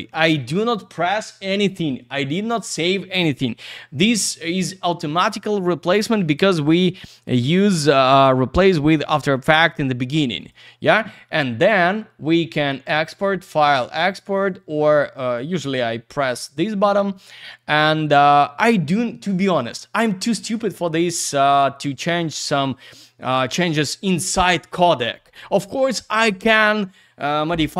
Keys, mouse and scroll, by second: 6.2 right click, 6.3 right click, 10.4 click, 10.5 click, 12.9 click, 13.1 click, 14.3 click, 14.4 click, 15.2 click, 15.3 click, 22.5 click, 22.6 click.